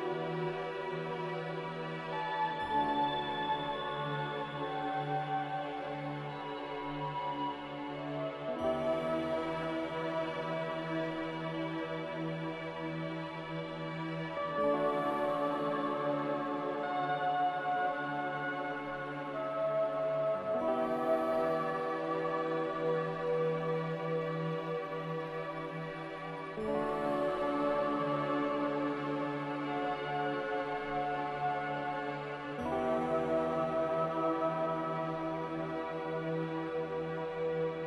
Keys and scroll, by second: 12.0 ctrl+z, 34.9 a.